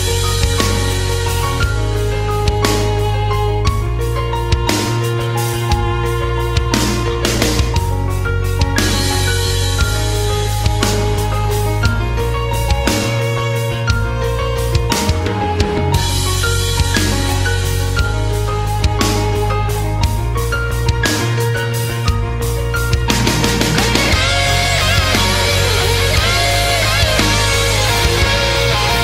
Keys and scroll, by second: 2.5 space, 5.0 space, 5.6 space, 7.2 space, 8.1 space, 11.9 space, 14.4 space, 19.7 ctrl+z, 20.3 ctrl+z, 20.4 ctrl+z, 21.2 space, 22.0 space, 22.5 space, 25.0 space, 27.0 space, 27.6 space, 28.5 space, 28.7 space.